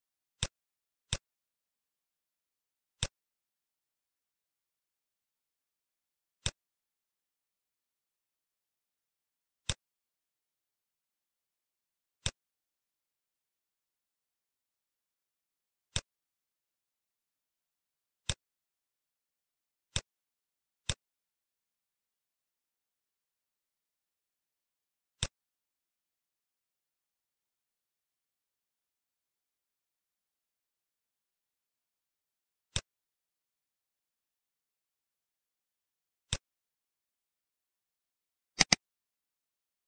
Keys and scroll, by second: 8.1 ctrl+t, 14.1 Return, 22.7 ctrl+s.